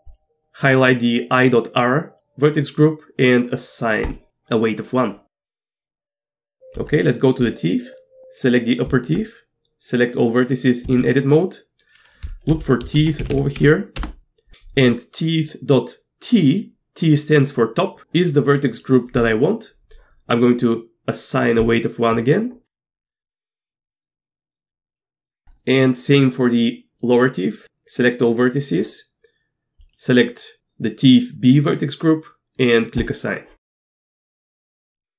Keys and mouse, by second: 0.1-0.6 drag, 4.1 click, 6.7 Tab, 8.9 Tab, 10.9 a, 12.1-14.5 drag, 13.0 e, 21.6 click, 22.9 Tab, 23.2 click, 23.8 click, 24.7 Tab, 27.6 a, 29.8 click, 33.0 click, 34.2 Tab.